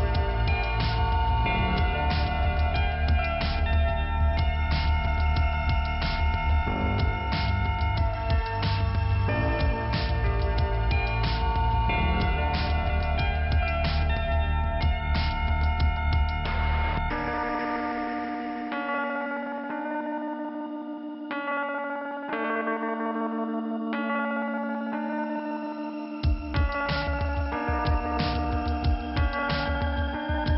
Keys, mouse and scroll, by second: 1.4 click, 1.5 click, 3.2 click, 4.2-4.6 scroll down 1, 5.2 click, 6.1 scroll down 2, 7.0 f, 7.4 scroll down 2, 9.2 click, 9.2 scroll up 1, 12.0 middle click, 13.1 click, 14.2 click, 15.6 click, 15.7 click, 21.5 scroll up 2, 23.5 click, 24.0 right click, 24.7 click, 25.8 click, 27.2 right click, 27.5 right click, 27.9 double right click, 29.1 click, 30.3 click.